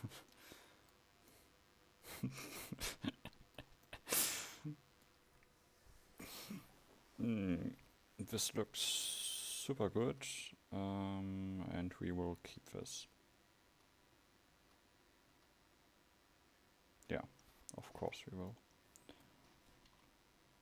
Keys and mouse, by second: 20.0 KP_1.